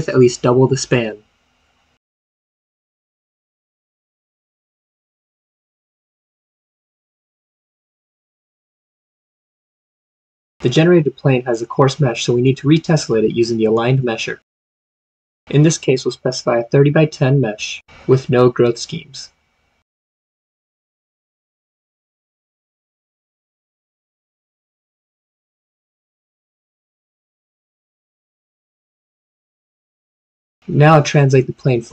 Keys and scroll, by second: 2.9 typing, 16.9-17.6 typing.